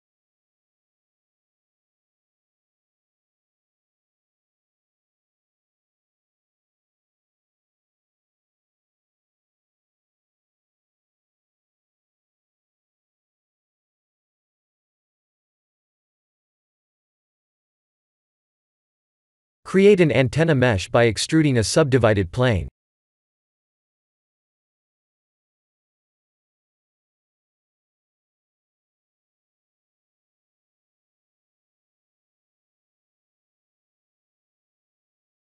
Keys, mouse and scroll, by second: 0.4 scroll up 4, 1.1 shift+middle click, 2.2 shift+click, 4.5 ctrl+j, 6.0 shift+d, 8.8 scroll down 5, 10.0 click, 11.6 click, 12.5 click, 14.2 click, 14.8 click, 15.4 click, 15.9 click, 18.8 click, 19.6 click, 20.3 click, 21.0 shift+a, 26.0 s, 27.4 g, 29.8 scroll up 4, 30.3 shift+middle click, 30.9 s, 32.3 middle click, 33.0 scroll up 5, 33.7 ctrl+3, 34.4 middle click, 34.8 Tab, 35.3 KP_1.